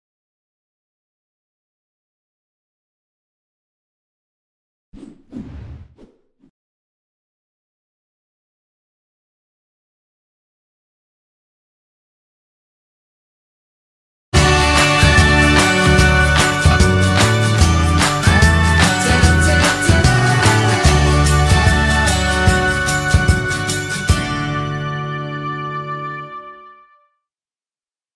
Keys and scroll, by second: 0.9 Delete.